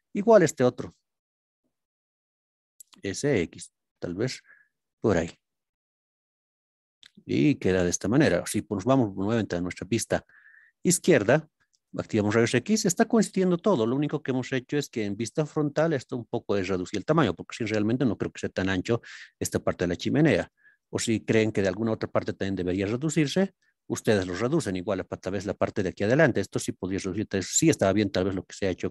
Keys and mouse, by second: 3.1 x, 5.1 click, 5.6-8.1 middle drag, 8.9 ctrl+KP_3, 10.4 shift+middle click, 15.1-16.1 middle drag, 17.3 middle click, 19.9-21.9 middle drag, 22.5 middle click, 23.4 shift+middle drag, 24.1 middle click, 25.0 click, 26.9 s, 27.2 x.